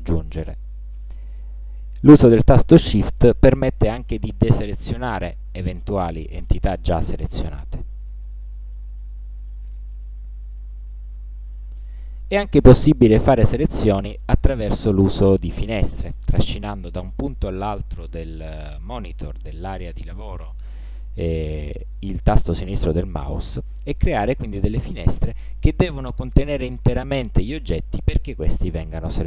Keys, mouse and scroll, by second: 3.3 shift+click, 4.5 shift+click, 8.5 shift+click, 9.5 shift+click, 11.5 shift+click, 16.8-21.0 drag, 26.3-27.8 drag.